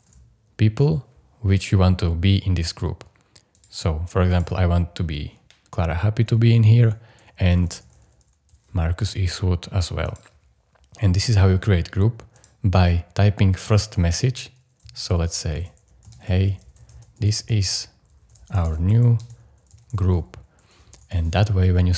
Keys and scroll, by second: 0.0-0.6 typing, 7.5 m, 7.8 r, 15.3-21.0 typing.